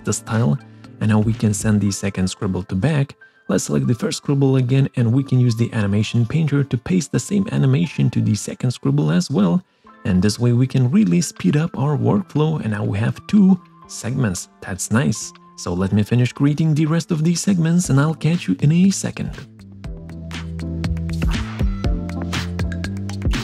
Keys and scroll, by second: 18.7 ctrl+shift+c, 19.1 ctrl+shift+v, 19.7 ctrl+shift+[, 23.3 ctrl+z.